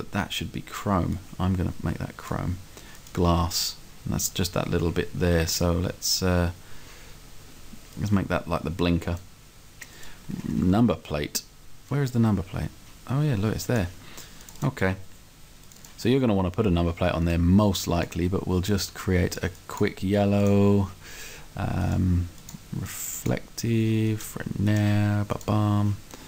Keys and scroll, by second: 10.7 s.